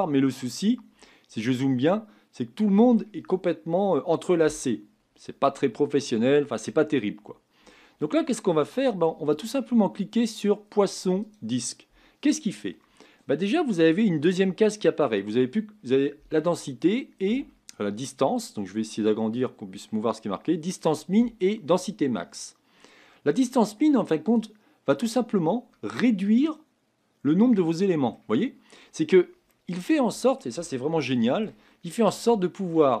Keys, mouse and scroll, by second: 1.1 scroll up 6, 1.8-8.0 middle drag, 8.0-9.1 scroll down 4, 11.3-25.7 drag, 25.7-33.0 middle drag.